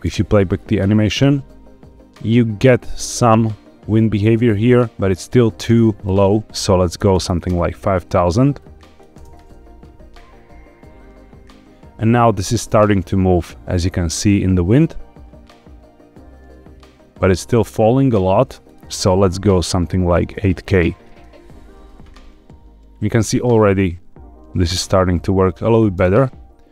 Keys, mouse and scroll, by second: 0.0 space, 5.6 space, 6.0-7.4 drag, 7.1 KP_0, 7.2 KP_0, 8.5 click, 9.1 space, 18.7-21.2 drag, 20.2 KP_0, 24.7 space, 24.8 click, 25.9 space.